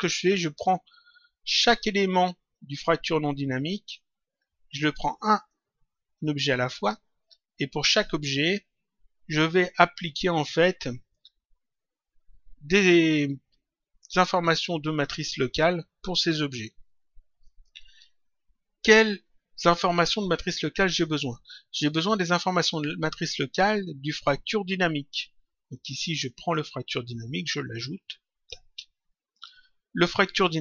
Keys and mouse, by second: 25.8 click, 26.9 click, 29.3 click.